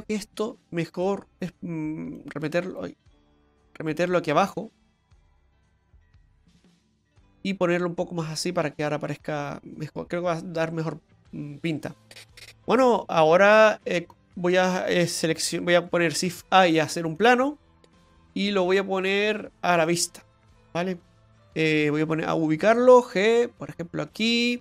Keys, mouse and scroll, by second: 0.2 right click, 1.1 right click, 2.2 click, 3.4 ctrl+z, 3.9 right click, 4.4 right click, 5.0 right click, 5.6 Tab, 5.9 right click, 6.4 Tab, 6.8 right click, 7.7 click, 13.6 Tab, 14.1 click, 16.3 shift+a, 19.0 click, 22.7 g.